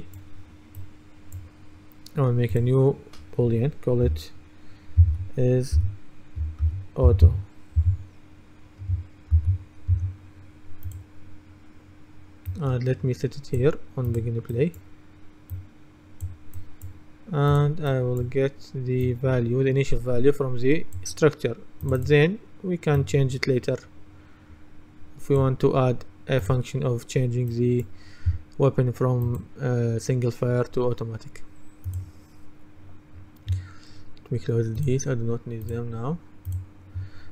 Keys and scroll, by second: 5.1-8.3 typing, 9.4 shift+/, 10.0 Return.